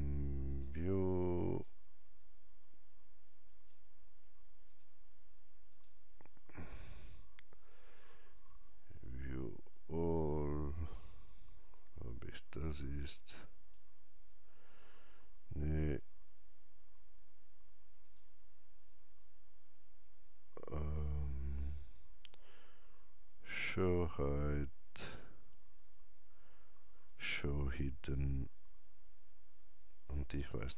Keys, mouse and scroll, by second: 0.5 click, 0.5 right click, 3.0 click, 3.5 click, 4.7 right click, 5.7 click, 13.5 right click, 13.5 click, 18.0 click, 27.1 click, 30.1 click, 30.1-30.5 scroll up 1, 30.5 scroll down 1.